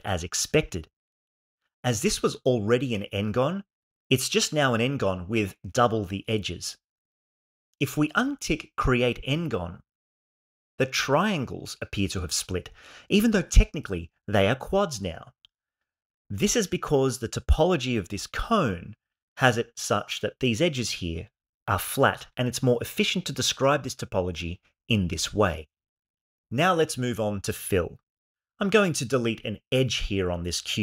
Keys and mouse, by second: 10.4-15.7 shift+middle drag, 16.2 click, 17.2 g, 28.3 click, 29.4 x.